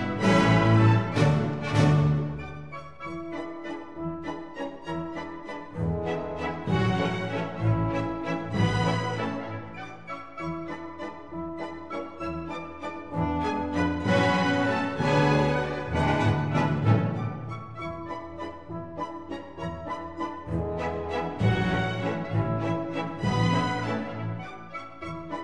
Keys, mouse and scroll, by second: 1.9 Tab, 6.9 ctrl+alt+shift+click, 9.7 ctrl+z, 10.3 ctrl+z, 12.9 ctrl+z, 12.9 Tab, 13.9 Tab, 18.1-21.3 ctrl+alt+shift+drag, 21.7 Tab, 22.5 middle click, 23.2 click, 23.6-24.7 middle drag, 24.9 ctrl+r.